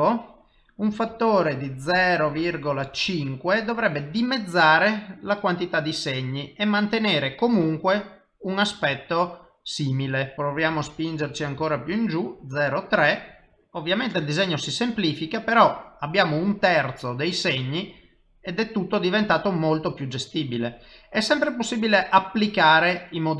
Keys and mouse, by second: 1.0 click, 4.9 middle click, 9.4 ctrl+middle click, 10.3 click, 13.9 middle click, 16.8 typing, 18.5 middle click, 21.5 typing.